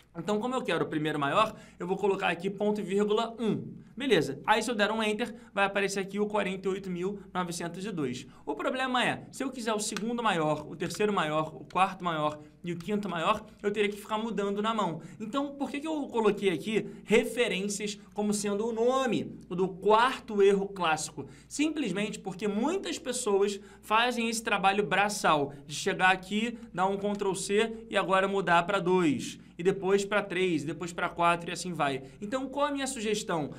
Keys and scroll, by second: 26.5 ctrl+c, 27.3 ctrl+v.